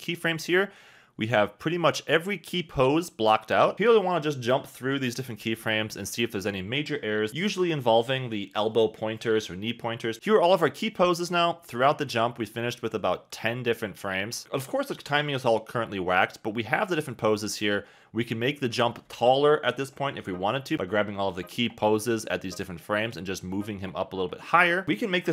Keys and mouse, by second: 0.1 space, 0.6 click, 1.4 click, 3.1 click, 3.1 KP_3, 3.4 click, 4.3 click, 4.7 click, 5.3 KP_1, 5.6 click, 6.0 click, 7.0 click, 8.5 click, 9.0 click, 9.4 click, 11.4 click, 11.7 click, 12.1 click, 12.6 click, 13.3 click, 13.9 click, 14.9 space, 18.6 space, 19.2 shift+click, 20.0 shift+click, 20.2 shift+click, 22.8 shift+click, 23.4 KP_1, 24.1 g.